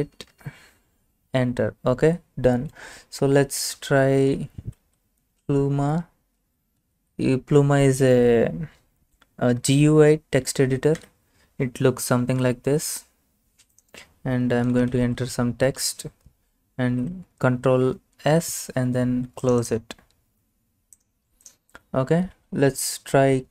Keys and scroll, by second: 0.4 Return, 3.4-5.3 typing, 6.8 typing, 11.0 Return, 14.5-15.4 typing, 16.9 ctrl+s, 23.2-23.5 typing.